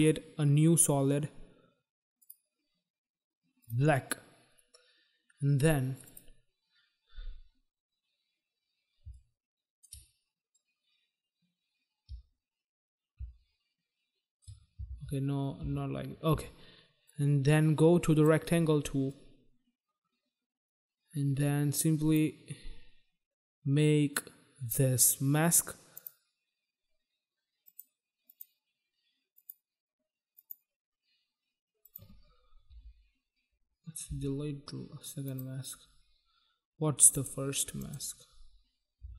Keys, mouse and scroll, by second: 2.1 click, 3.6 click, 5.8 click, 6.1 click, 9.0 shift+click, 10.3 click, 14.8 ctrl+z, 15.5 ctrl+z, 17.0 click, 19.0 click, 25.8 click, 27.6 click, 28.2 click, 29.3 click, 30.3 click, 31.8 click, 33.8 Delete, 35.2 click, 37.1 click, 37.8 click, 39.0 Delete.